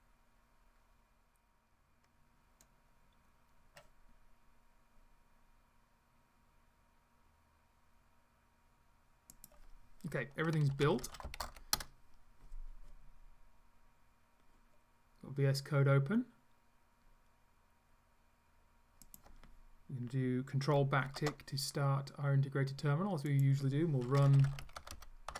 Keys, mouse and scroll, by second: 9.3 click, 10.5-12.0 typing, 19.1 click, 21.1 ctrl+`, 23.3 click, 23.8-25.3 typing.